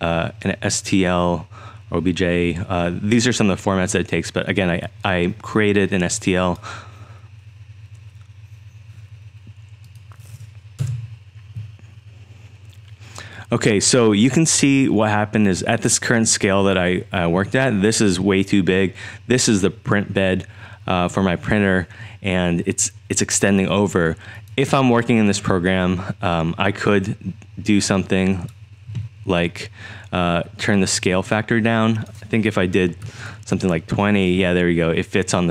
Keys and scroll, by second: 10.8 Return, 32.6-33.6 typing, 33.7 Tab.